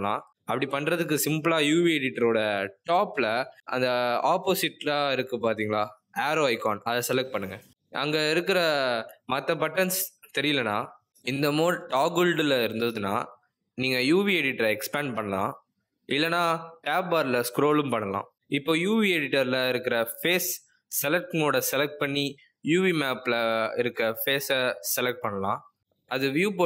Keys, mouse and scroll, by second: 7.8-8.8 scroll down 4, 8.8-10.4 scroll up 4, 10.4-11.2 scroll down 4, 11.2-11.6 scroll up 5, 13.4 click, 18.1 click, 20.8 click, 22.2 click, 26.5 click.